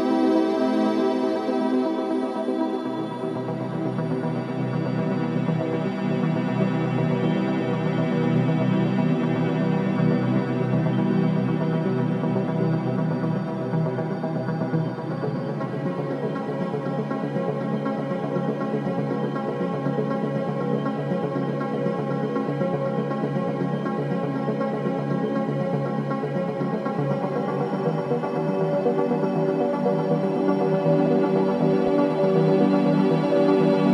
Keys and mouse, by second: 0.5 click, 3.7 click, 9.1 click, 9.7 click, 10.2 click, 11.7 click, 12.7 click, 13.8-14.3 typing, 16.4 shift+click, 17.1 click, 18.1-18.4 typing, 20.4 shift+click, 21.9-24.2 ctrl+alt+drag, 26.2-26.6 typing, 28.5 shift+click, 30.5-31.9 ctrl+alt+drag.